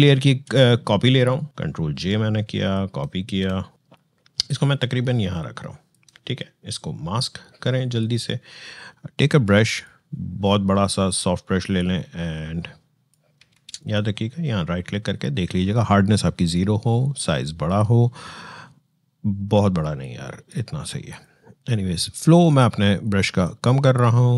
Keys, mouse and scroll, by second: 0.0 ctrl+h, 1.5-13.3 drag, 13.3 ctrl+z, 13.6 right click, 16.8-19.8 drag, 19.8-24.3 drag.